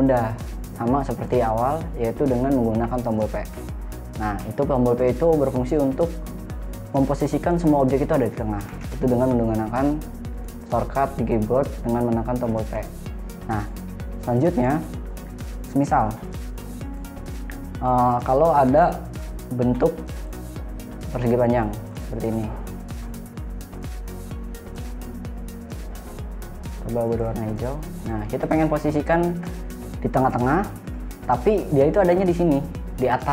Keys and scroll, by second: 4.0 p, 9.0 p, 12.9 p, 19.1 Delete.